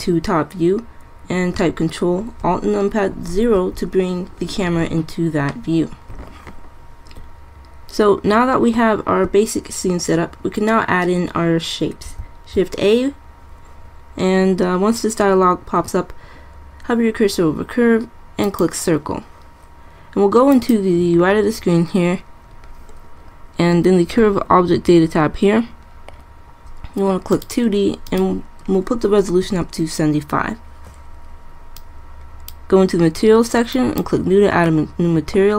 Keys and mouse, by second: 3.4 ctrl+alt+KP_0, 12.3 shift+a, 20.7-22.2 drag, 24.4-27.5 drag, 31.9-33.6 drag, 33.9-35.4 drag.